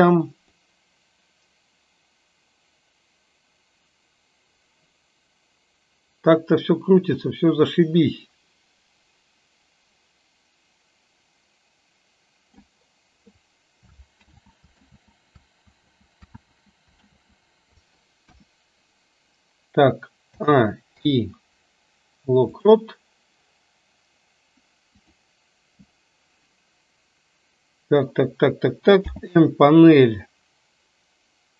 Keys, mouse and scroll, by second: 0.8-12.8 drag, 14.3 ctrl+z, 14.9 ctrl+z, 15.8 ctrl+z, 16.4 ctrl+z, 17.0 ctrl+z, 18.3 KP_1, 20.3 a, 20.9 i, 29.0 n.